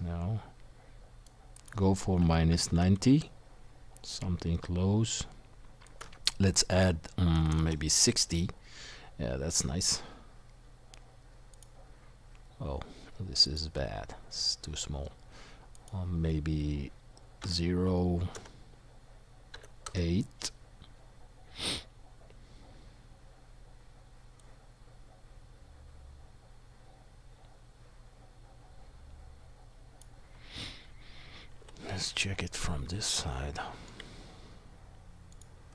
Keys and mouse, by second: 31.6 KP_1, 33.2-35.7 shift+middle drag.